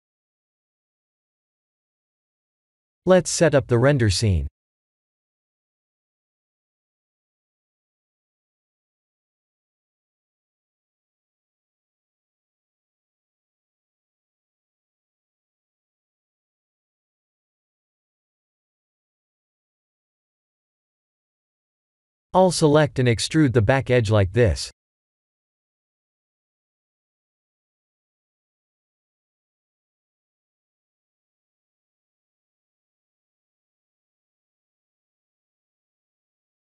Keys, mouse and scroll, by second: 0.3 click, 0.9 ctrl+a, 1.9 click, 2.9 ctrl+a, 3.3 click, 5.3 click, 5.7 click, 6.2 click, 6.8 click, 7.5 ctrl+alt+KP_0, 8.2 shift+`, 14.6 click, 14.9 shift+a, 17.3 s, 19.0 s, 21.1 g, 23.6 Tab, 23.9 2, 24.2 click, 25.0 KP_3, 26.5 KP_1, 27.3-28.0 scroll down 7, 28.7 e, 31.4 KP_3, 33.5 e, 35.3 e.